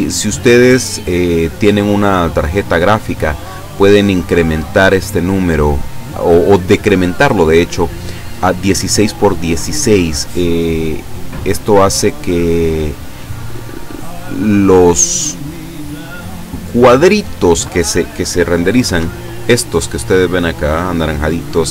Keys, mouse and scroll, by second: 16.1 scroll up 2, 16.7 scroll down 2, 18.9 F12.